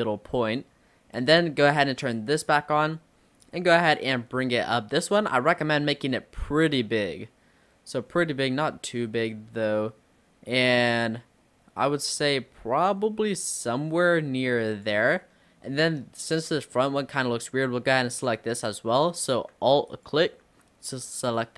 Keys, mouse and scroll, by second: 2.2 click, 3.5 click, 15.2-16.8 middle drag, 16.8 scroll up 1, 19.9 alt+click, 21.3 click.